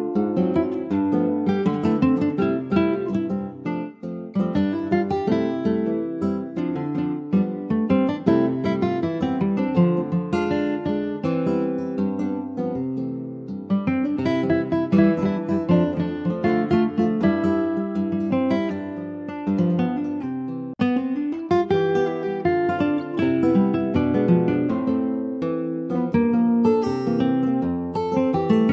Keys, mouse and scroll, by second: 4.6-7.9 middle drag, 7.9-8.6 scroll down 6, 8.6 middle click, 9.2-9.9 scroll up 3, 9.9-11.9 shift+middle drag, 11.9 ctrl+s, 12.7 click, 12.9 scroll down 2, 13.3 middle click, 13.4 scroll up 1, 13.7 shift+middle click, 14.1-14.4 shift+scroll up 4, 14.8-15.9 middle drag, 15.9 ctrl+s, 18.6 click, 22.1 click, 24.3 click, 25.2-26.8 middle drag, 26.8-28.3 scroll up 2, 28.3-28.7 shift+middle drag.